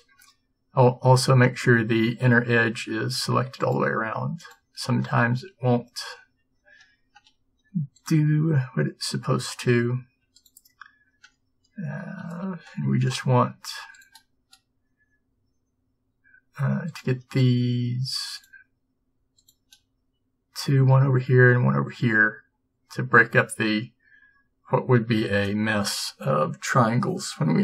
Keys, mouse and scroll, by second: 3.7-9.8 middle drag, 12.6 ctrl+z, 17.0-21.3 drag.